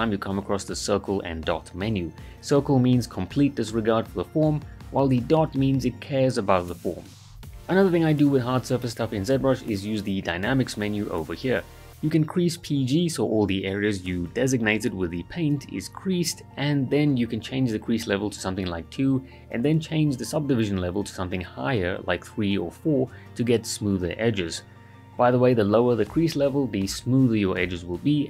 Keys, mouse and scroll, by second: 1.5 ctrl+shift+z, 3.2 click, 6.9-7.6 right click, 7.5 click, 7.5-8.8 right drag, 10.4-12.1 shift+drag, 14.5 ctrl+right click, 15.9 click, 16.4-19.9 shift+drag, 18.8-19.7 click, 21.1-22.1 click, 23.2 shift+f, 23.9 alt+right click, 24.8-25.1 right click, 25.3 alt+right click, 26.1 alt+right click, 26.8 alt+right click.